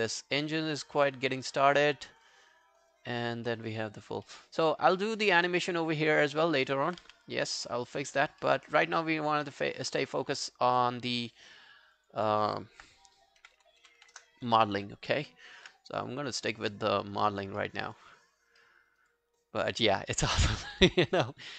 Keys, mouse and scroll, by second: 1.1 alt+middle click, 1.3 alt+right click, 1.7 alt+click, 2.3 alt+click, 3.5 alt+click, 3.5 alt+middle click, 3.7 alt+right click, 4.0 alt+click, 4.3 alt+middle click, 5.0 alt+middle click, 5.2 alt+right click, 6.7 alt+middle click, 7.1 q, 7.7 alt+middle click, 7.7 alt+middle click, 7.9 alt+right click, 8.1 alt+click, 8.5 alt+middle click, 8.8 alt+scroll down 1, 9.1 alt+click, 11.9 double click, 12.0 double click, 13.2-14.5 typing, 16.7 alt+middle click, 17.0 alt+right click, 17.3 alt+click, 17.6 alt+middle click, 17.9 alt+right click, 18.1 alt+click, 18.6 alt+middle click, 18.9 alt+right click, 19.1 alt+click, 19.9 alt+middle click, 20.1 alt+right click, 20.3 alt+click, 20.8 alt+middle click, 21.0 alt+right click, 21.3 alt+click.